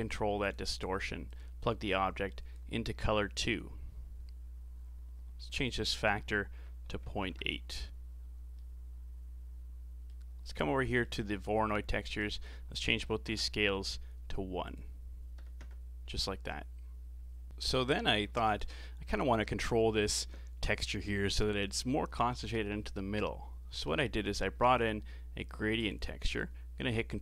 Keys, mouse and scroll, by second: 1.3 click, 5.5-8.5 drag, 8.5-11.2 middle drag, 11.2-11.9 scroll up 4, 12.2-17.5 drag, 17.5 middle click, 18.3 shift+a, 26.8 ctrl+t.